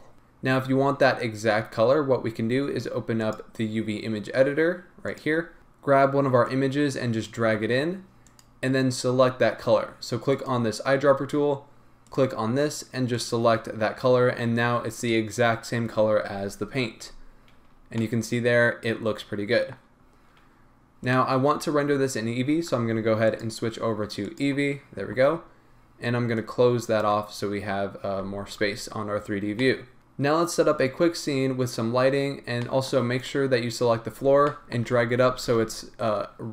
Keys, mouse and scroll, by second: 0.1-13.1 drag, 17.8 middle click, 17.8 scroll down 2, 17.9 scroll up 2, 18.0-21.0 middle drag, 21.0 click, 23.3-29.5 drag, 25.2 scroll down 1, 27.4-28.6 scroll down 1, 28.6 z, 29.0-29.5 scroll down 1, 29.5-33.3 middle drag, 33.3 click, 33.8-34.1 scroll up 1, 34.4-36.5 shift+middle drag, 34.9-35.3 scroll up 1, 35.3 g.